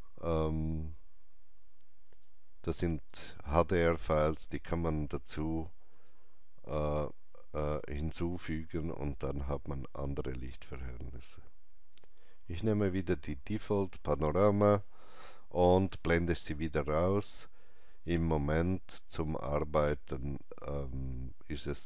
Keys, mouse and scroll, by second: 2.1 click, 5.9 click, 10.6 click, 11.9 click, 17.0-20.6 drag.